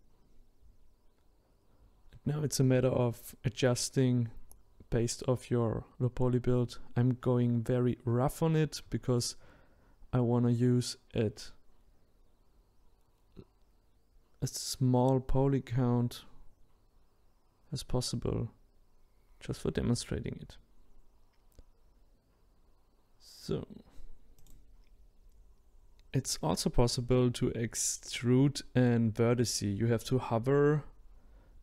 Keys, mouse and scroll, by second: 9.1 middle click, 9.8-10.3 scroll down 2, 10.3-11.5 shift+middle drag, 11.5-20.7 drag, 20.7-22.0 middle drag, 22.0-24.3 drag, 24.3 shift+middle click, 24.8-26.2 drag, 28.0-31.6 drag.